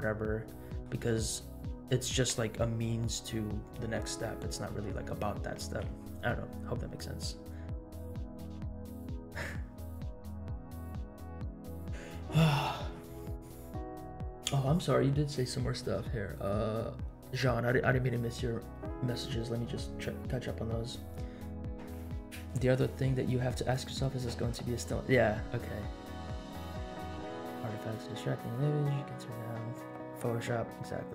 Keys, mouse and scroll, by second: 0.4-0.8 middle drag, 1.3 middle click.